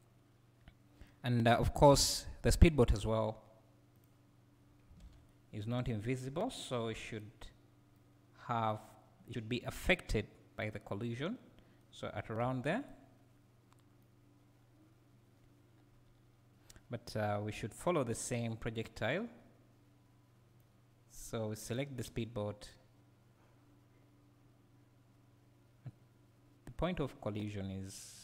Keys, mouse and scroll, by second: 2.9 click, 6.4-6.9 scroll up 2, 7.9-12.9 right drag, 12.5 g, 12.9 click, 14.0-21.8 right drag, 21.8 click, 22.7-28.2 right drag.